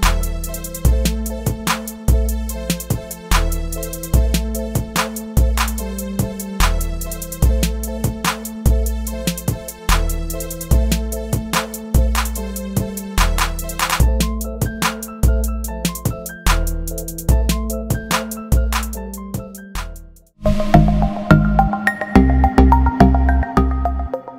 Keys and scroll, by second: 1.2 shift+Return, 1.5 shift+Up, 2.7 shift+Right, 4.2 shift+Left, 8.4 shift+BackSpace.